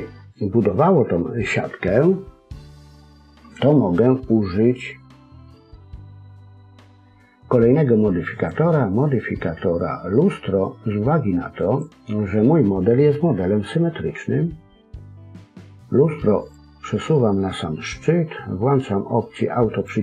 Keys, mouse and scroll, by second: 0.7 scroll down 1, 8.3 click, 16.3 click, 19.7 click.